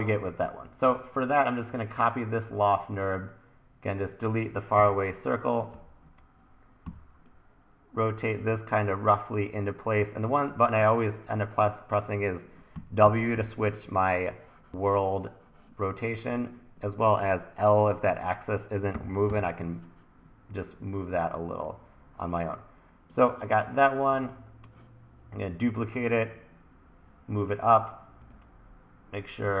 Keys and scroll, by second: 4.8 BackSpace, 5.7 t, 6.8 r, 8.4 e, 10.8 1, 12.8 w, 19.0 l.